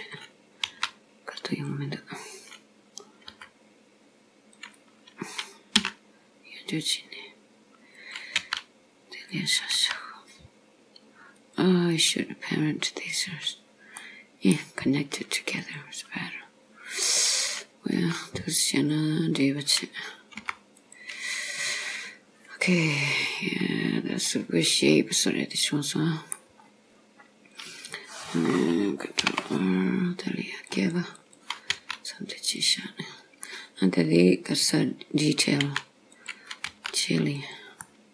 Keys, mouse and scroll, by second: 1.6 s, 3.4 g, 5.9 e, 8.5 s, 9.8 g, 13.5-14.0 scroll down 3, 14.0 middle click, 15.6 click, 16.5-17.0 scroll up 2, 17.4 click, 18.0 g, 19.8 click, 20.5 g, 21.4 click, 23.7-24.3 scroll down 1, 24.3 scroll down 1, 24.3 middle click, 26.6 scroll up 4, 27.7 click, 29.3 ctrl+r, 31.8 s, 33.1-33.5 scroll down 4, 33.5 middle click, 35.7 s, 36.8 g, 37.9 middle click.